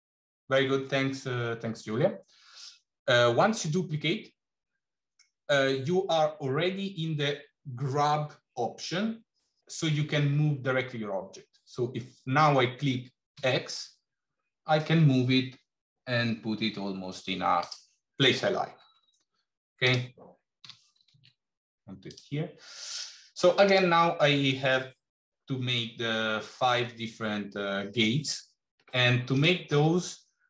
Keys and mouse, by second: 20.5 g, 29.2 click.